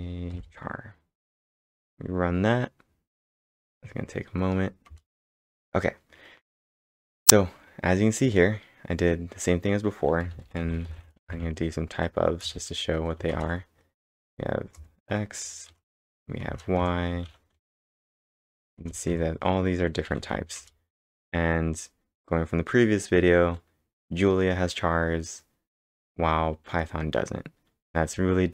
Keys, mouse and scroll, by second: 1.1-1.8 typing, 3.5 b, 4.9 ctrl+Return, 10.0-12.4 typing, 13.3 ctrl+Return, 14.2 ctrl+Return, 15.4 y, 15.8 ctrl+Return, 16.4 ctrl+Return, 17.3 a, 17.7 ctrl+Return, 18.8 ctrl+Return, 20.1 b, 20.6 ctrl+Return.